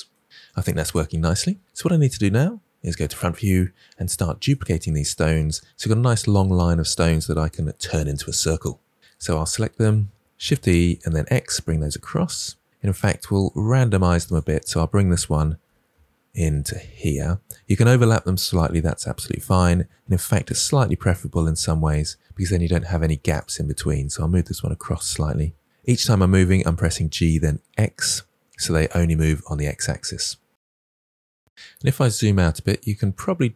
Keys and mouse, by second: 2.8 KP_1, 10.1 shift+d, 10.6 x, 14.6 click, 15.6 g, 15.8 x, 17.6 click, 18.7 g, 20.0 x, 22.2 click, 23.6 click, 24.2 g, 25.0 x, 26.1 click, 26.4 g, 26.5 x, 30.9 shift+d, 30.9 x.